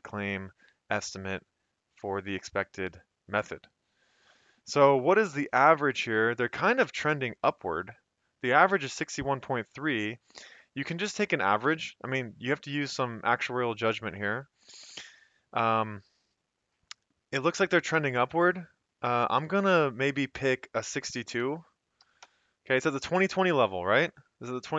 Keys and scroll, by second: 21.4-22.0 typing, 22.2 Return.